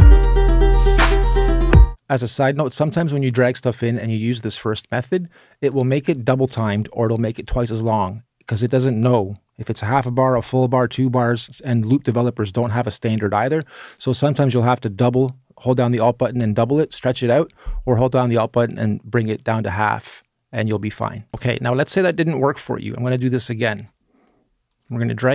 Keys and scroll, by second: 21.3 space, 21.3 BackSpace, 22.3 BackSpace.